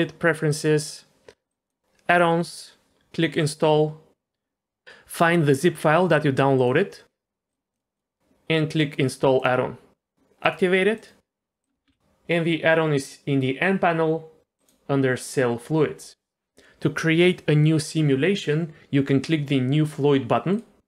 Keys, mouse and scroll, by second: 11.8 n, 14.6 click, 20.5 click.